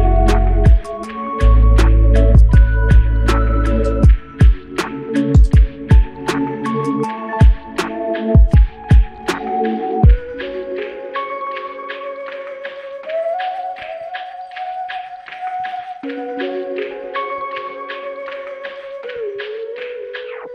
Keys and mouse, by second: 9.6 double click.